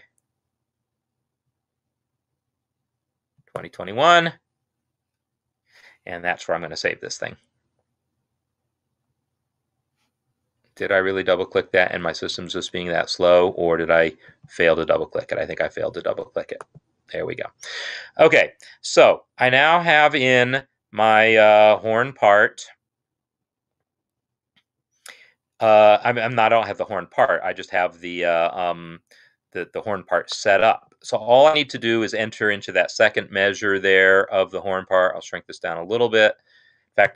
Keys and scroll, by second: 36.9 ctrl+\.